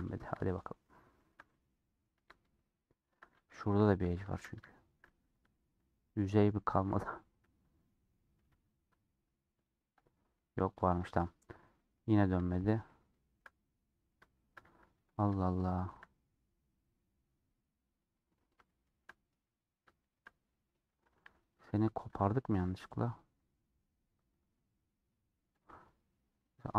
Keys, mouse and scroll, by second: 3.5 2, 3.9 click, 4.7 shift+middle click, 5.2 3, 5.4-6.6 middle drag, 8.6 3, 10.0 click, 11.0 alt+click, 11.3-11.7 scroll down 3, 11.7-14.9 middle drag, 14.9 scroll up 1, 15.6-18.3 shift+middle drag, 18.3 scroll down 1, 18.6-19.7 shift+middle drag, 19.7 scroll up 1, 19.9 shift+middle click, 20.3-20.8 scroll down 2, 20.8 middle click, 21.2 1, 22.2-26.7 drag.